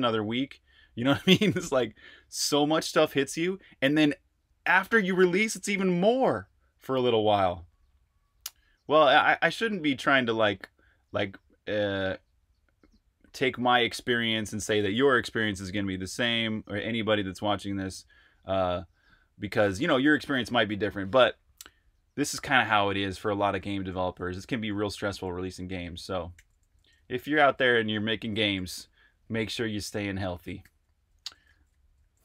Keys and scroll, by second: 24.8-27.4 typing, 30.3-32.2 typing.